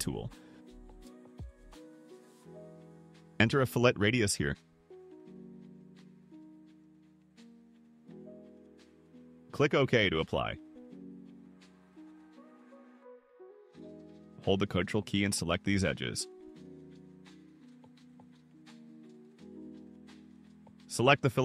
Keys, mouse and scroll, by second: 0.1 click, 3.5 2, 5.2 BackSpace, 6.4 5, 6.9 0, 10.3 click, 11.6 click, 12.7 middle click, 13.4 click, 14.1 ctrl+click, 14.8 ctrl+click, 15.1 ctrl+middle click, 15.1-15.6 ctrl+scroll up 4, 15.5 ctrl+middle click, 16.5 ctrl+click, 16.7 ctrl+scroll down 2, 17.1 ctrl+scroll up 1, 17.8 ctrl+click, 18.6 ctrl+click, 18.9-19.3 ctrl+scroll down 2.